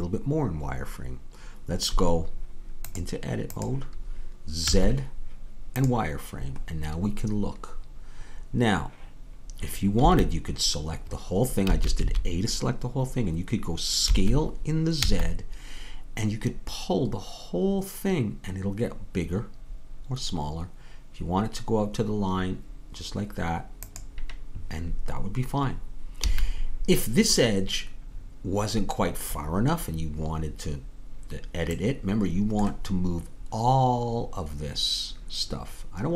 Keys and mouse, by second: 4.6 z, 7.2-10.1 middle drag, 10.1 a, 11.7 a, 14.1 s, 26.3 a, 31.8-33.9 middle drag.